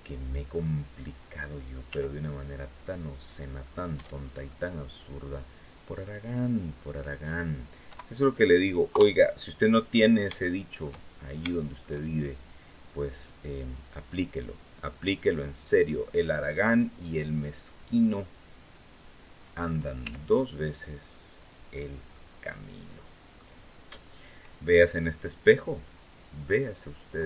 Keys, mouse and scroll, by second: 1.6 s, 2.5 click, 3.0-3.3 scroll up 2, 3.4 scroll down 2, 3.9 shift+scroll down 2, 4.2 shift+click, 4.8 scroll down 2, 5.6-7.1 drag, 7.6 KP_7, 8.6 KP_3, 9.6-10.0 scroll up 3, 10.1 shift+middle click, 11.1 scroll up 2, 11.2 shift+middle click, 12.4-13.6 drag, 14.6-16.4 drag, 17.1-19.3 drag, 19.7 s, 21.1 click, 21.5 scroll down 1, 21.8-23.3 middle drag, 25.0-26.9 drag.